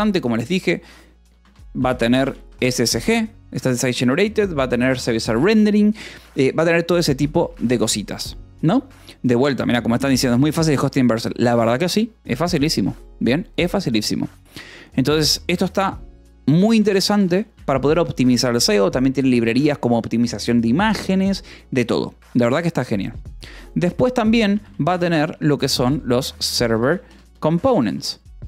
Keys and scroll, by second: 1.7 space, 3.7 -, 3.8 space, 5.2 shift+s, 5.3 Escape, 7.0 l, 16.6 b, 17.5 Escape, 23.6 o, 24.4 shift+;, 24.5 space, 25.9-28.4 typing.